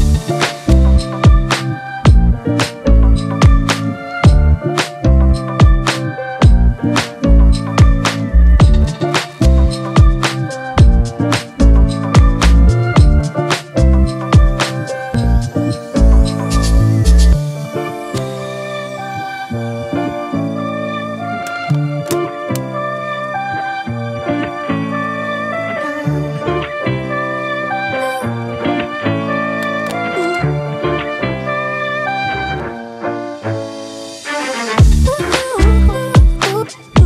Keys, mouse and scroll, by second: 7.4 shift+click, 9.0 shift+click, 10.0 shift+click, 10.2 shift+click, 12.0 shift+click, 16.4 right click, 27.3 ctrl+t, 28.2 alt+shift+click, 34.2 Return.